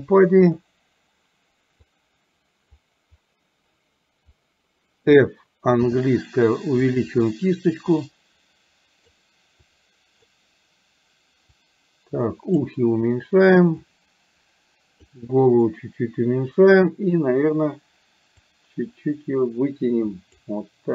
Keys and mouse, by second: 1.9-2.9 drag, 5.9 f, 8.0-9.1 drag, 9.6 click, 11.6-12.6 drag, 13.9-15.1 drag, 18.4-20.5 drag.